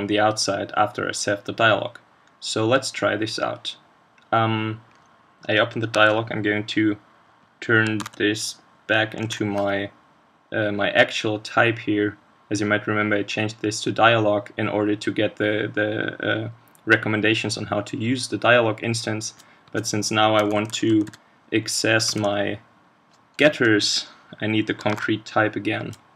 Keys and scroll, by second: 6.0 super+Left, 8.0 super+c, 10.0 super+v, 24.9 super+1.